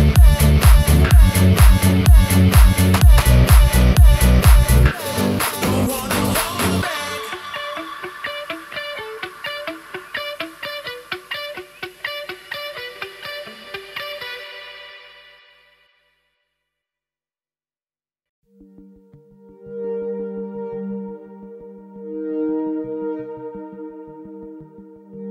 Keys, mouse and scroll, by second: 0.0 alt+z, 0.5 scroll down 2, 0.8-2.0 middle drag, 2.3-2.6 scroll down 2, 3.3 middle click, 3.3 scroll down 1, 4.1-4.8 shift+middle drag, 5.5 shift+a, 13.0 click, 13.6-14.1 middle drag, 14.5 s, 15.8 click, 18.3 ctrl+z, 19.9 shift+z, 20.5-21.2 right drag, 22.8 click, 25.2-25.3 middle drag.